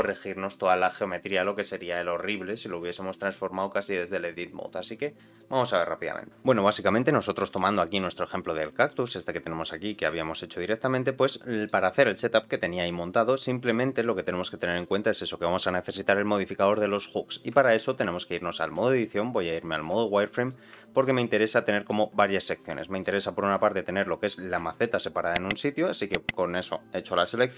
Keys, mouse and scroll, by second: 0.5 click, 1.3 click, 2.1 click, 2.9 click, 3.7 click, 4.3 click, 8.4 click, 9.0 z, 9.7-10.8 middle drag, 11.2 middle click, 13.6 scroll up 2, 14.2-16.2 scroll down 1, 17.5 Tab, 17.8-18.4 scroll down 2, 18.7-20.0 scroll down 1, 18.7 z, 20.1 middle click, 20.7 shift+middle click, 21.6 shift+middle click, 22.6 middle click, 23.2 shift+middle click, 24.5 scroll up 1, 24.7 shift+middle click, 25.7 middle click.